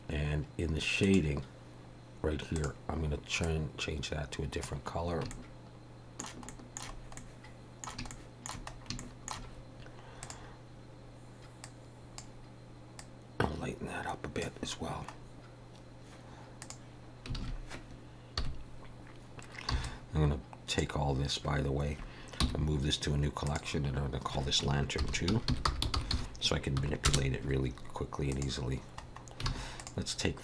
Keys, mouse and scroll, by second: 16.6 click, 16.6-17.3 scroll down 1, 17.4 alt+a, 18.4 KP_1, 19.7 b, 22.4 m, 29.1 scroll up 3, 29.5 alt+a, 29.8 click.